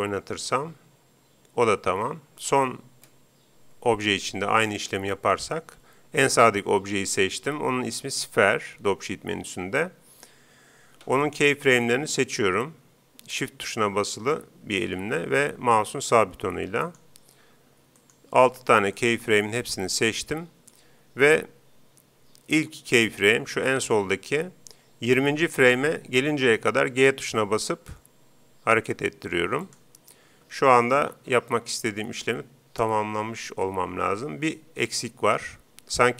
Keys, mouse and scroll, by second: 2.5 Escape, 4.0-5.8 right drag, 11.3-13.9 right drag, 15.7-20.5 right drag, 26.8 g, 29.7-31.5 drag, 31.1 alt+a.